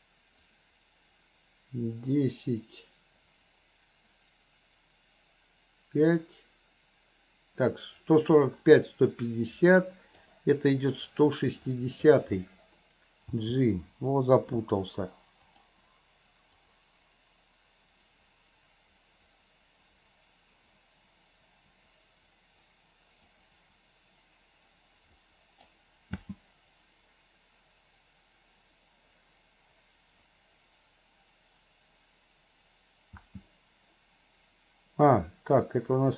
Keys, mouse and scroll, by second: 0.5-10.4 drag, 11.1 click, 13.4 g, 16.7-25.8 drag, 26.2 space, 33.3 space.